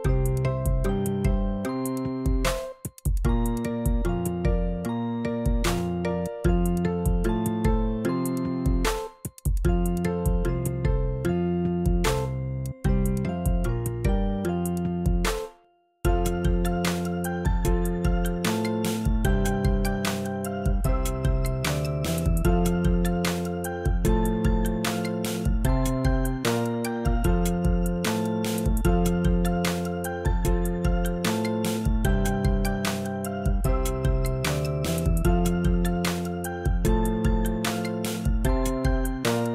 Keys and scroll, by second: 6.1 v, 6.7 shift+v, 6.9 shift+Down, 15.0 shift+super+Down.